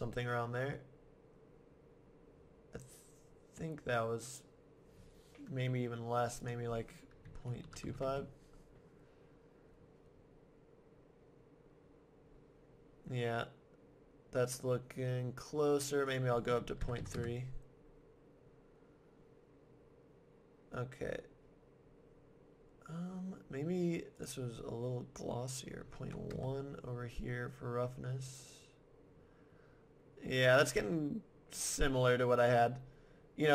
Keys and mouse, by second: 6.4-8.2 drag, 16.1-17.8 middle drag, 24.2-26.1 drag.